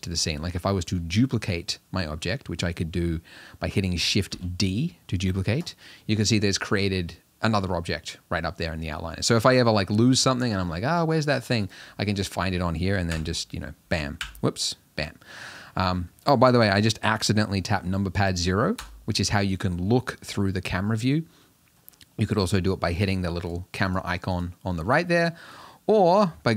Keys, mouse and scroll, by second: 4.3 shift+d, 11.7 click, 13.1 KP_0, 14.2 KP_Decimal, 15.6-16.1 scroll down 6, 16.1 scroll up 2, 18.8 KP_0, 21.5 middle click, 21.8-23.0 scroll down 2, 23.0 click, 23.4 click, 23.9 click, 24.3 click.